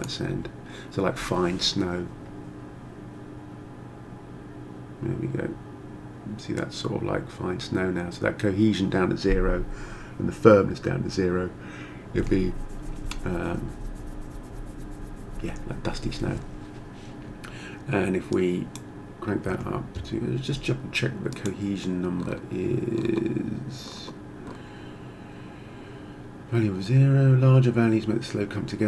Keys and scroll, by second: 19.5 1, 19.9 Return.